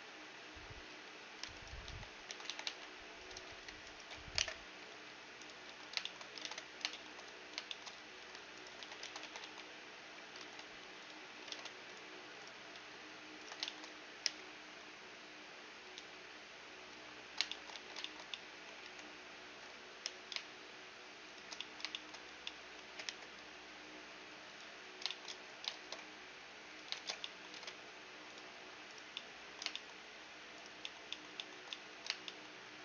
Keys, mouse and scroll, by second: 0.5 middle click, 0.5 z, 1.1-3.0 right drag, 1.9 ctrl+e, 1.9 z, 2.2 a, 3.0 c, 4.6 alt+m, 5.2 a, 5.4-9.1 middle drag, 6.0 ctrl+Tab, 7.6 z, 8.1-10.0 right drag, 8.4 z, 8.6 ctrl+e, 9.0 a, 10.0 ctrl+Tab, 11.1 ctrl+Tab, 12.1-13.8 right drag, 13.8-15.5 middle drag, 13.8 i, 17.0 click, 17.0 z, 17.2-19.9 middle drag, 17.4 z, 18.4 e, 20.8 e, 21.2-23.9 middle drag, 22.1 z, 22.5 g, 24.2 z, 24.5-26.9 middle drag, 25.3 shift+space, 26.2-28.5 drag, 26.5 shift+space, 27.1 ctrl+Tab, 28.5-32.8 right drag, 28.7-32.8 middle drag.